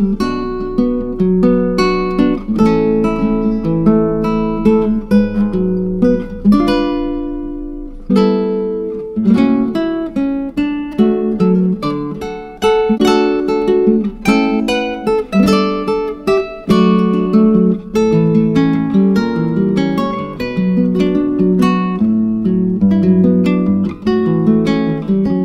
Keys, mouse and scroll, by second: 0.8 alt+shift+z, 1.2 scroll down 3, 2.5 click, 6.8 click, 8.2 click, 10.2 click, 12.4 click, 14.7-16.2 drag, 25.0 BackSpace.